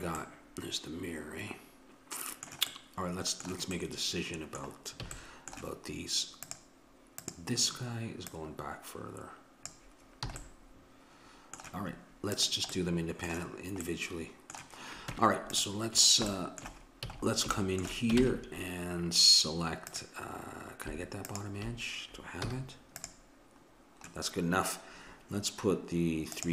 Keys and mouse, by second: 2.8-4.3 middle drag, 5.1 a, 6.7-10.1 drag, 10.3 a, 10.4-12.4 middle drag, 12.4-14.2 drag, 15.1 Tab, 17.1 a, 18.2 ctrl+Tab, 21.3-23.2 drag, 22.5 z, 26.4-26.5 drag.